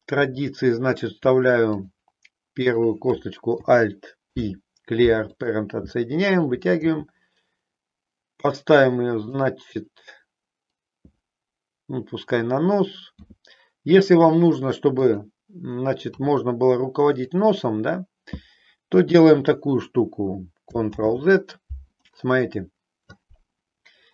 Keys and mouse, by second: 0.3 e, 2.7 click, 4.1 alt+p, 6.8 g, 13.1 s, 20.9 ctrl+z.